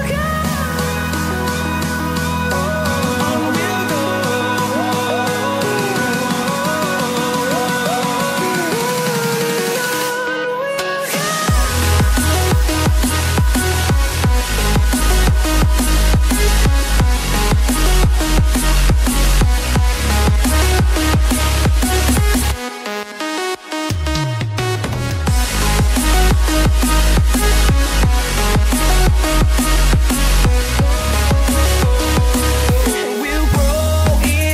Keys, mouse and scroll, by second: 9.0 scroll up 1, 9.6-10.2 scroll down 1, 10.2 click, 17.5 scroll up 1, 18.3 click, 18.9 ctrl+c, 19.1 ctrl+v, 19.8 click, 21.5 click, 22.8 scroll up 1, 23.6 click, 25.3 scroll down 1, 25.8 right click, 27.5 click, 31.0 ctrl+c, 31.2 ctrl+v, 32.1 click.